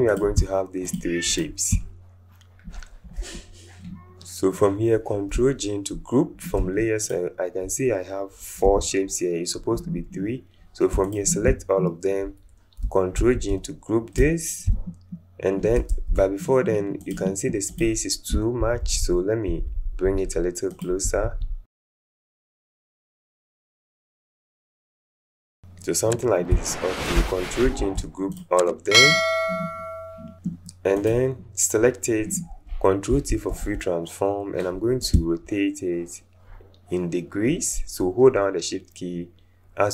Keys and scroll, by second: 8.6 Delete, 13.2 ctrl+g, 15.9 ctrl+z, 18.6 Down, 18.8 Down, 19.0 Down, 19.5 Down, 19.6 Down, 19.8 Down, 20.0 Down, 20.2 Down, 21.0 Up, 21.2 Up, 21.4 Up, 21.7 Up, 22.5 Down, 22.8 Down, 23.1 Down, 23.7 Up, 27.6 ctrl+shift+g, 33.1 ctrl+t.